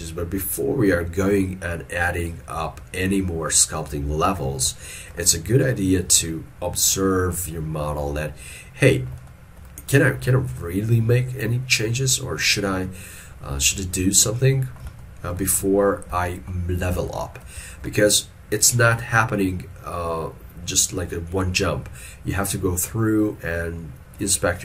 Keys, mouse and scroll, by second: 5.0 shift+middle click, 15.1 shift+middle click, 16.3 ctrl+middle click, 17.2 ctrl+middle click.